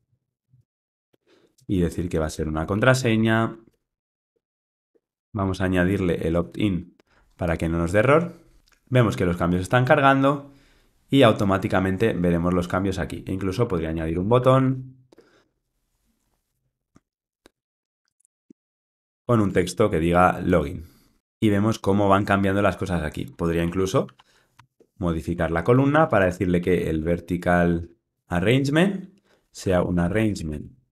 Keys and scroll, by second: 1.5 Return, 5.3 alt+Return, 16.6 Return, 19.4 Return, 19.5 Tab, 28.4 Return.